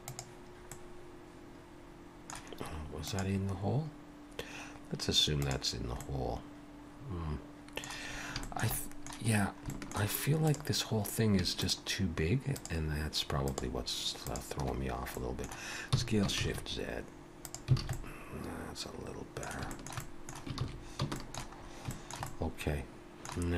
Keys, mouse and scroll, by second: 0.7 middle click, 6.0 middle click, 8.2 scroll up 1, 8.4 shift+middle click, 8.7 middle click, 9.4-10.0 scroll down 2, 9.7 shift+middle click, 10.4 click, 10.9 scroll up 2, 11.6 shift+click, 12.6 click, 13.4 shift+click, 14.7 shift+click, 14.8-15.2 scroll down 2, 15.2 middle click, 15.9 s, 17.8 alt+a, 17.9 middle click, 19.7 shift+middle click, 20.0 middle click, 20.7 ctrl+s, 21.2 shift+middle click, 21.6-21.9 scroll up 2, 21.9 shift+middle click, 22.3 middle click.